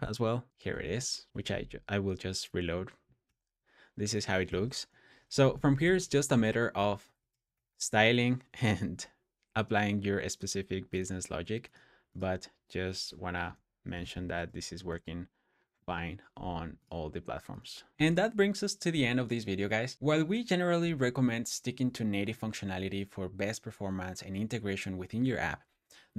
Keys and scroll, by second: 0.5 super+o, 3.1 super+s, 4.3 super+s, 5.5-8.1 typing, 13.5-15.3 typing.